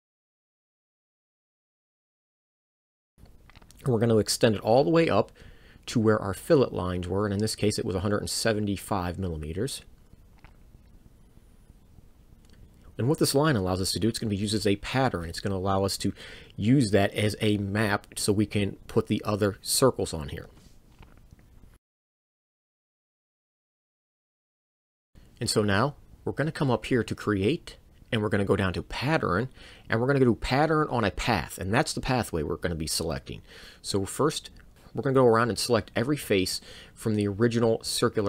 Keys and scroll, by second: 18.1 1, 19.0 7, 19.4 5, 21.2 m, 21.9 Return.